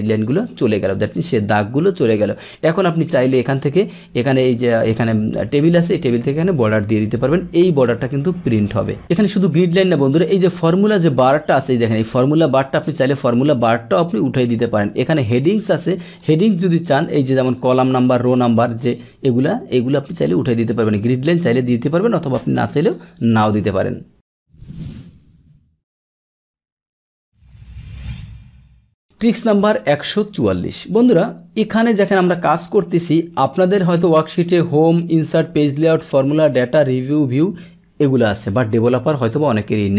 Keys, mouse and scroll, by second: 0.0 click, 0.3 click, 1.0 click, 1.4-2.4 drag, 3.5 click, 4.6 click, 5.4 click, 6.0 click, 8.0-9.0 drag, 10.4 click, 11.0 click, 12.6 click, 13.1 click, 15.2 click, 16.1 click, 16.9 click, 17.5 click, 18.1 click, 18.7 click, 20.8 click, 29.2 click, 39.3 click.